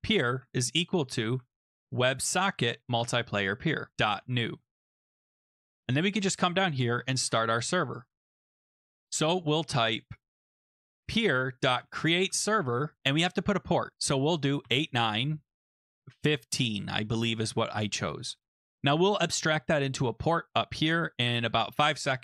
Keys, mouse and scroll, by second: 0.0-5.4 typing, 0.0-1.6 drag, 5.9 click, 6.3 click, 6.9-8.3 scroll, 10.6-12.7 typing, 14.4-16.5 typing, 18.6 click, 18.9 click, 19.0 click, 21.3 click.